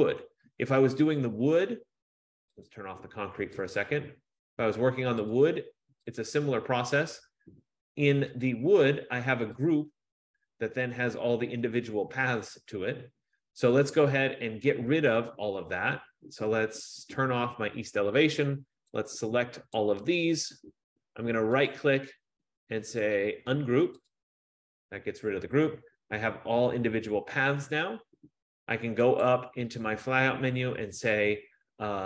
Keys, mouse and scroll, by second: 2.9 click, 3.9 click, 5.5 click, 5.9 F15, 6.3 click, 8.7 click, 10.0 click, 17.3 click, 19.9 click, 22.0 right click, 24.2 click, 29.5 click.